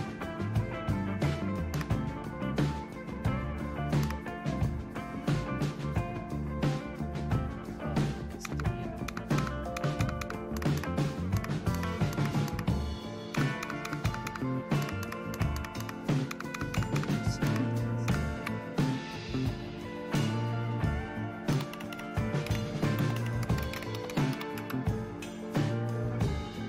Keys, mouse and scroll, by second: 1.7 super+Right, 4.0 super+Right, 8.4 super+Left, 9.1 super+Left, 9.4 super+Left, 10.0 super+Left, 10.6 super+Right, 10.8 super+Right, 11.3-12.1 super+Right, 13.3 super+Left, 13.6 super+Left, 13.9-14.3 super+Left, 14.8 super+Right, 15.0 super+Right, 15.4-15.8 super+Right, 16.3 super+Left, 16.5 super+Left, 16.8 super+Left, 17.4 super+Right, 18.1 super+Left, 21.3-24.8 typing.